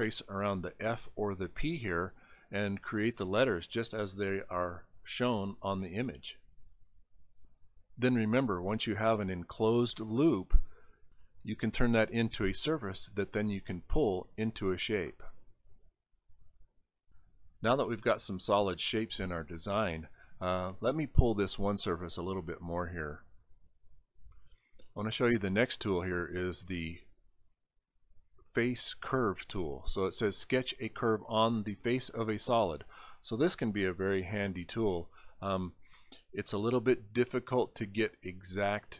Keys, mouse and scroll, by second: 10.0 click, 10.7 click, 13.1-14.4 drag, 15.1 middle click, 16.0 scroll up 1, 22.2 click, 22.8-23.9 drag, 36.0 click, 38.8 click.